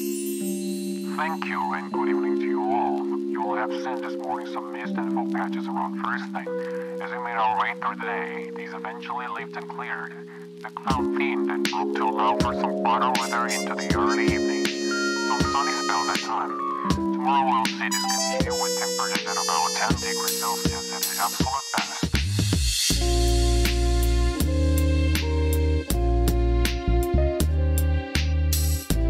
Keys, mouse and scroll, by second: 0.1 shift+click, 0.4 click, 0.6-2.3 drag, 2.5 alt+shift+click, 3.1 shift+middle click, 4.0 KP_1, 6.4 middle click, 7.0 a, 7.8 e, 10.2 click, 11.5 Tab, 12.0-13.5 middle drag, 13.6 alt+z, 14.1 shift+middle drag, 14.5 middle click, 16.3 s, 17.0 click, 17.8 KP_1, 18.9 shift+middle click, 19.5 shift+middle click, 21.2 g, 21.8 click, 22.3 shift+middle drag, 22.9 shift+middle click, 24.1 s, 24.3 z, 25.3 click, 26.1 s, 26.6 click, 27.1 alt+z, 28.4 r.